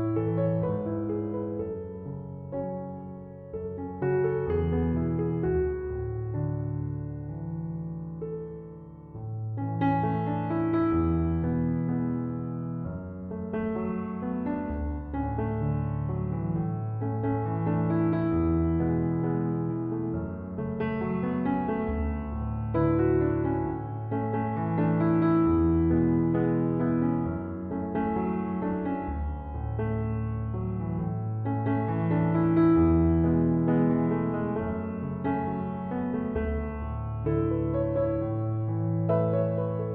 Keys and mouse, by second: 0.4 right click, 3.3 click, 9.3 click, 16.5-24.5 drag, 24.5 click, 28.6 click.